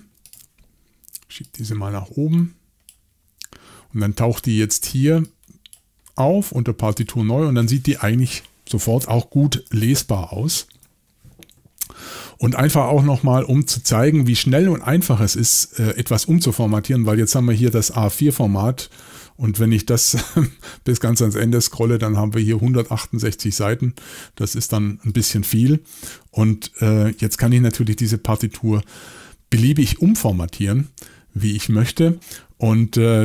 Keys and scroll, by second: 9.7-11.2 typing, 13.0 typing.